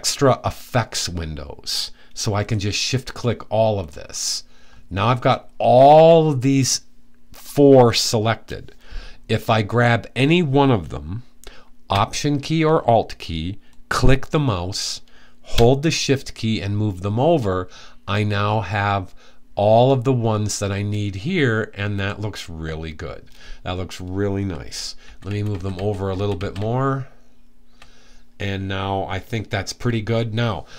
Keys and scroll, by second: 24.6 Right, 24.9-27.2 typing.